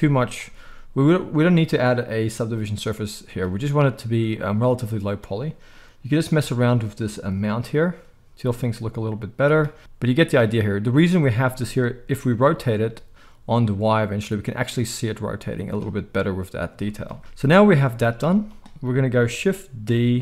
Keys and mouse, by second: 3.5 z, 9.4-9.9 drag, 9.4-9.9 right drag, 12.2 r, 15.7-20.2 drag, 17.2 KP_1, 18.2 z, 19.8 shift+d.